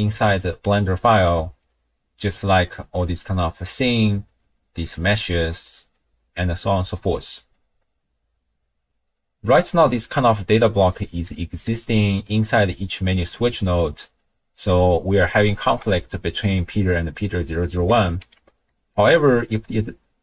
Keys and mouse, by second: 0.7-1.7 drag, 2.6 click, 3.7 click, 4.8 click, 9.9 n, 10.8 click, 11.3 middle click, 12.6 click, 14.6-15.2 drag, 15.6 ctrl+shift+d, 18.2 n, 18.6 click.